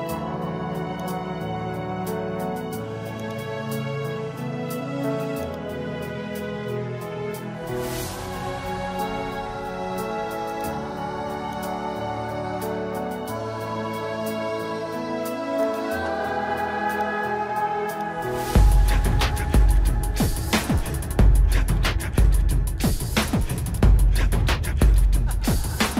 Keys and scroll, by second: 1.5 ctrl+alt+z, 2.2 ctrl+alt+z, 4.9 space, 15.1 ctrl+-, 17.6 ctrl+-, 18.6 ctrl+-.